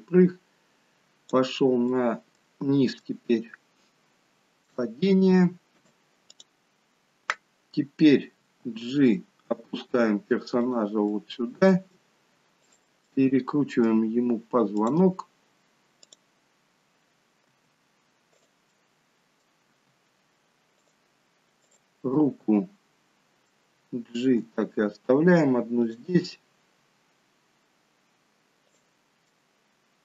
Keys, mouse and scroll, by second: 1.8 middle click, 2.9 shift+middle click, 5.1-6.0 scroll down 1, 6.0 shift+middle click, 8.4 g, 11.0 middle click, 12.8 click, 13.1 middle click, 14.7 click, 16.2 click, 17.5 r, 18.7 middle click, 19.7 r, 21.6 click, 22.0 middle click, 24.4 g, 28.6 click, 29.2 middle click.